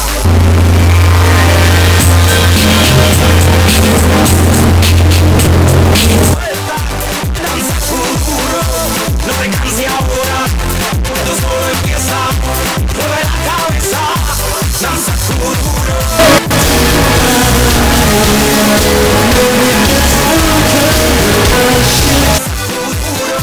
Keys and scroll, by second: 6.5 Page_Down, 23.0 Page_Down.